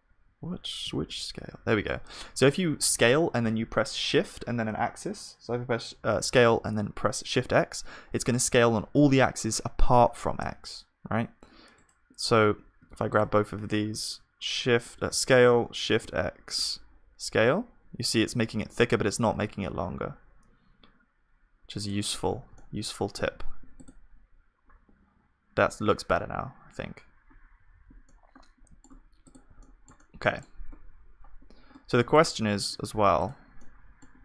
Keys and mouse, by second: 15.1 s, 23.8 ctrl+s, 24.6-25.6 drag, 25.9-34.2 middle drag, 27.6-34.2 drag, 27.6-34.2 right drag.